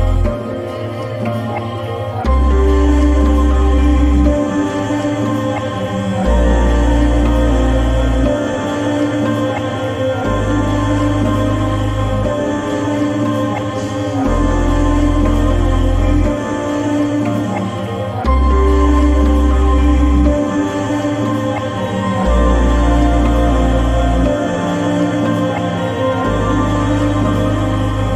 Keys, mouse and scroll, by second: 5.0 click, 5.0-9.6 drag, 13.4 click, 16.2-27.5 drag.